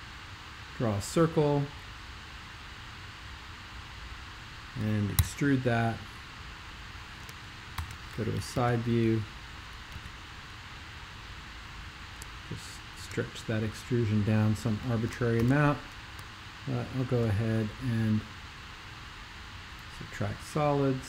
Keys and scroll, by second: 5.2 super+e, 7.8 alt+shift+super+k, 8.5 super+2, 9.9 x, 15.4 alt+shift+super+l.